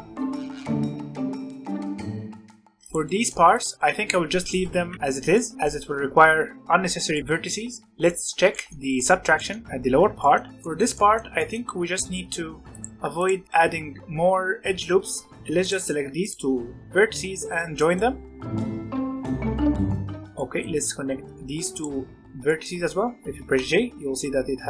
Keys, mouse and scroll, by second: 0.1 g, 0.4 click, 0.5 shift+click, 0.7 j, 0.9 alt+a, 0.9 shift+click, 1.2 j, 1.4 middle click, 1.5 alt+a, 1.6 Tab, 1.7 shift+middle click, 1.8 Tab, 1.9 middle click, 2.6 scroll up 1, 2.8 click, 3.0 middle click, 3.4 click, 3.7 z, 3.9 z, 4.4 middle click, 4.7 alt+a, 4.9 click, 5.3-6.6 middle drag, 6.6 Tab, 7.1 middle click, 7.2 Tab, 7.6 Tab, 7.8-10.4 shift+middle drag, 10.4 scroll up 2, 10.5-12.7 shift+middle drag, 12.7 click, 13.1 shift+click, 15.3 j, 15.6 click, 16.1 shift+click, 17.1 j, 17.7 shift+middle click, 18.2 shift+click, 19.1 j, 19.3 middle click, 19.3 click, 19.6 shift+click, 20.2 j, 20.3-21.7 middle drag, 21.7 shift+click, 22.4-23.5 middle drag, 23.5 j.